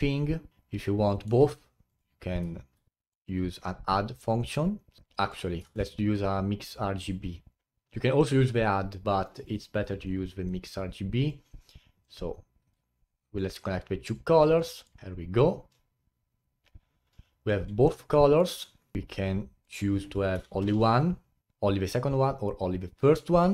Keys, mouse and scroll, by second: 0.5-1.8 middle drag, 1.8 click, 2.7 shift+d, 2.9-3.4 middle drag, 3.4-3.9 scroll up 5, 5.3 click, 5.6 shift+a, 8.5-9.3 drag, 9.3 Delete, 9.4 click, 10.0 click, 11.4 click, 12.7 click, 14.5-15.0 middle drag, 15.0-16.9 drag, 17.9-19.6 middle drag, 19.6-23.4 drag.